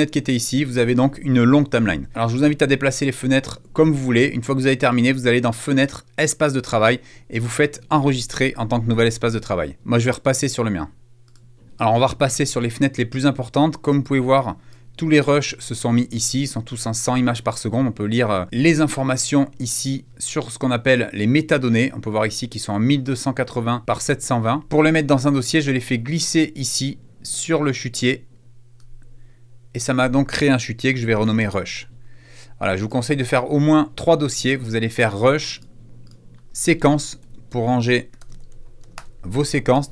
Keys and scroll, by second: 30.4-31.6 typing, 32.2 Return, 36.2-39.1 typing.